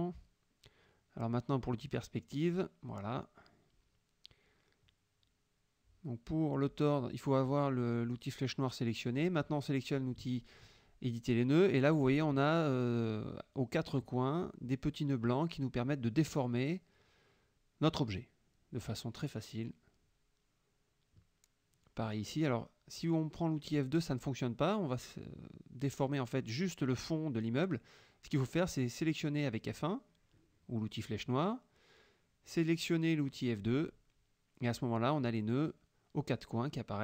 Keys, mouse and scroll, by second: 1.3-7.5 middle drag, 7.5 click, 8.1 click, 8.6 click, 11.5 F2, 12.2 middle click, 12.7 middle click, 16.7-21.3 drag, 23.0 click, 25.0-27.1 drag, 27.9 ctrl+z, 28.4 ctrl+F1, 28.9 ctrl+click, 30.3 F1, 31.2 click, 32.0 click, 35.4 F2.